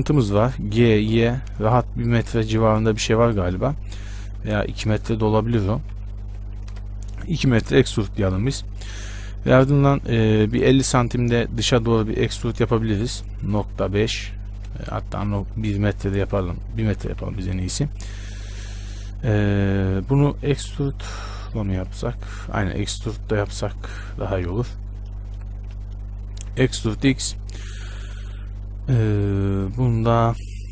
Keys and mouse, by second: 1.1 g, 7.6-10.8 middle drag, 10.8-14.6 right drag, 11.4 e, 17.2 g, 20.7 ctrl+z, 24.5 z, 25.9 z, 26.4 e.